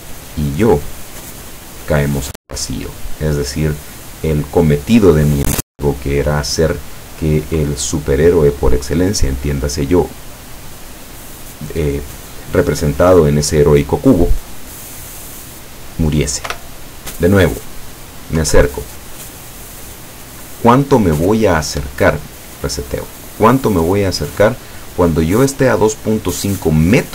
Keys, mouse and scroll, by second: 16.5 p, 18.5 Down, 21.9 Escape, 22.9-24.3 drag.